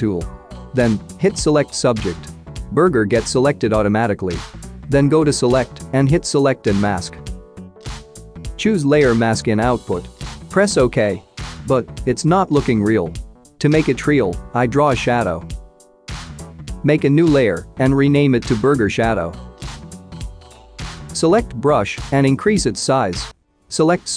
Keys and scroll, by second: 17.9-19.2 typing, 19.5 Return.